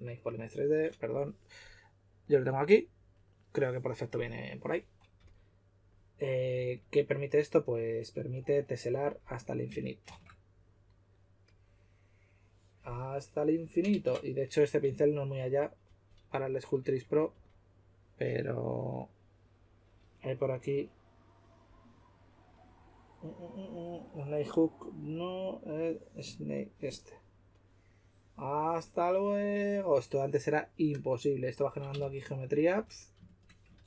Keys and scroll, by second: 5.1 typing, 9.6 typing, 13.9 super+z, 14.8 typing, 17.3 typing, 18.5 typing, 32.0-32.7 typing, 33.7 super+z.